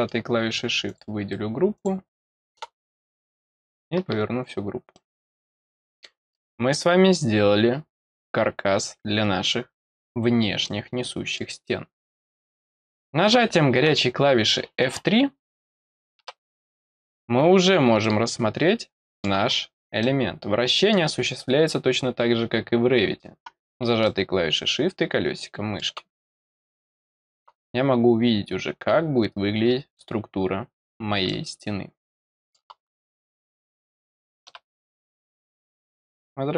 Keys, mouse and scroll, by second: 0.8 click, 1.7 click, 2.3 click, 3.1 click, 4.9 middle click, 5.7 middle click, 6.3 middle click, 8.8 scroll down 2, 10.0-10.3 scroll down 2, 10.6 middle click, 18.0-19.2 middle drag, 19.4 scroll up 2, 20.0 middle click, 24.0-25.7 middle drag, 26.4 middle click, 27.7-28.8 scroll up 4, 29.6-31.0 scroll down 8, 31.2-32.5 middle drag.